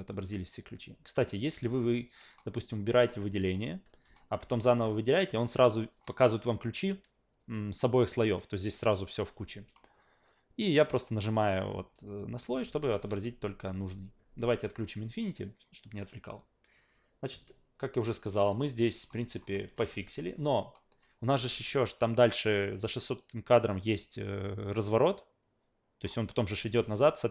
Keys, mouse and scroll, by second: 1.5 f, 2.3 alt+middle click, 2.6 alt+right click, 2.9 alt+right click, 3.2 alt+right click, 3.5 alt+middle click, 4.2 alt+middle click, 4.4 f, 4.9-5.3 alt+right drag, 6.0-6.6 alt+middle drag, 7.4 alt+right click, 11.1 click, 12.9 alt+middle click, 13.1 a, 14.7 click, 15.5 click, 18.0-18.3 drag, 18.5 alt+right click, 18.8 alt+middle click, 19.1 alt+middle click, 19.5 alt+middle click, 19.9 alt+v, 20.4 alt+middle click, 21.4 alt+v, 22.8-26.0 drag.